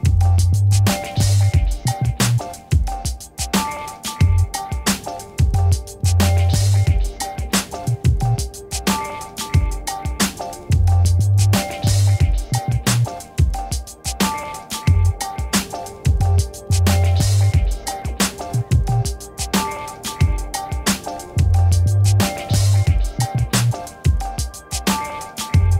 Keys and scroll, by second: 1.4 v, 3.0 ctrl+d, 4.7 m, 6.4 v, 8.0 ctrl+d, 18.1 0, 19.9 Return, 25.6 0.